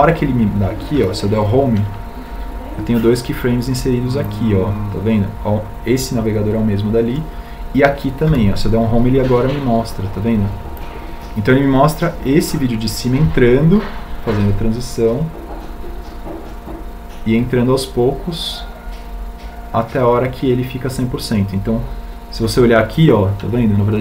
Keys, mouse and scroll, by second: 4.3 Home, 11.6 Home.